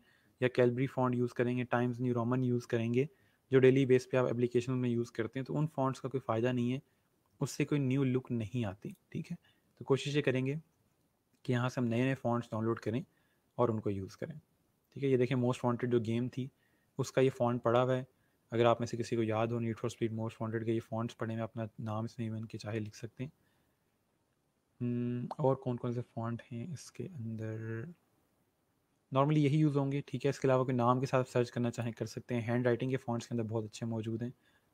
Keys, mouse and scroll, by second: 8.8 click, 10.1 scroll down 1, 15.7 scroll up 1, 21.9 scroll down 1, 22.7 scroll up 1, 32.3 click, 33.8 scroll down 1.